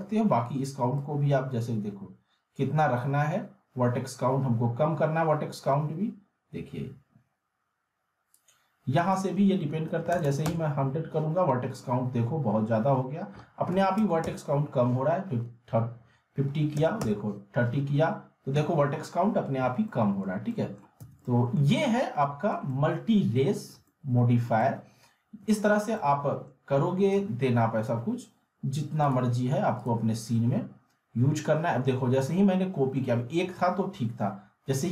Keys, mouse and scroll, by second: 1.0-8.4 drag, 19.9-20.5 middle click, 21.0 z, 21.2-21.8 alt+middle click, 21.7 scroll up 1, 22.0-22.6 alt+middle click, 22.7-24.4 alt+middle drag, 25.6-26.5 middle click, 25.7 scroll down 3, 26.4 scroll down 1, 27.1-28.0 shift+drag.